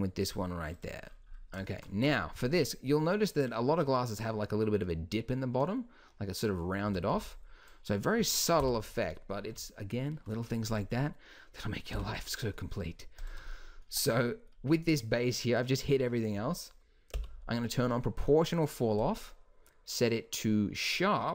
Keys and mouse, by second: 6.9 a, 7.2 b, 8.6 h, 11.9 h, 13.9 z, 17.1 o.